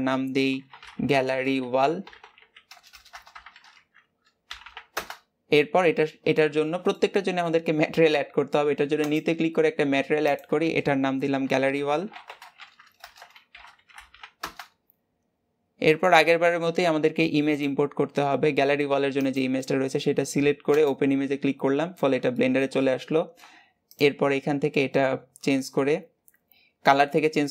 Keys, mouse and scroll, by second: 4.8 l, 6.2-9.0 middle drag, 9.0-14.3 drag, 16.4-17.6 scroll up 2, 17.6-20.9 drag.